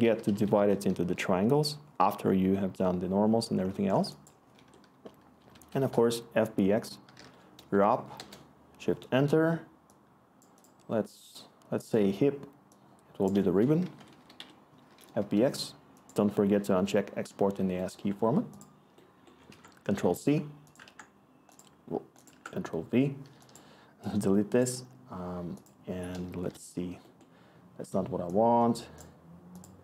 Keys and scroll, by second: 0.0-0.8 typing, 1.0 Return, 4.5 Tab, 5.1-7.7 typing, 8.1 Return, 9.1 Tab, 13.3-15.2 typing, 19.5 ctrl+c, 20.8 ctrl+v, 23.1 ctrl+v, 23.3 y, 26.0 h.